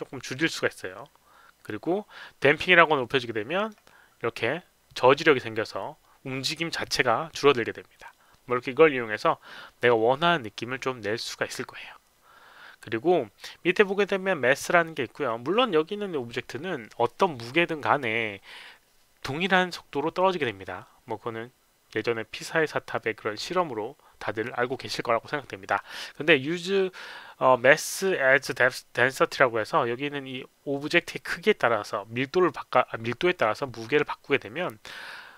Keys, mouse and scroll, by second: 3.2 click, 13.8 click, 27.9 click.